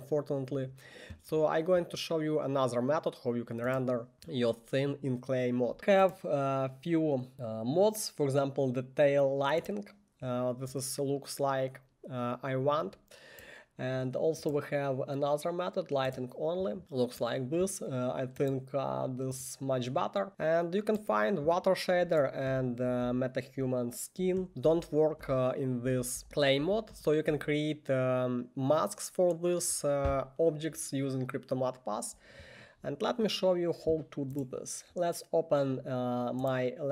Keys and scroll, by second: 22.2-27.7 typing.